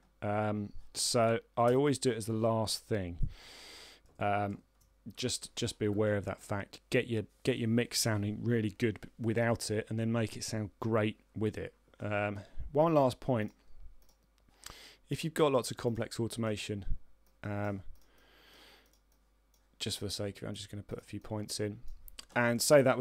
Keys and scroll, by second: 1.9 z, 3.2 ctrl+Right.